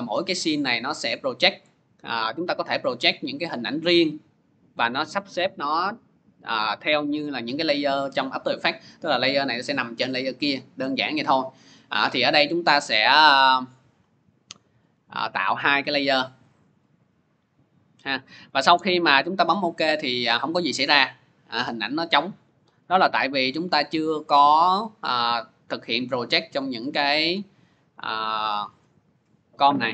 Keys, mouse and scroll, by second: 16.3 click, 20.2 click, 20.8-24.9 drag, 29.0 click, 29.5 click.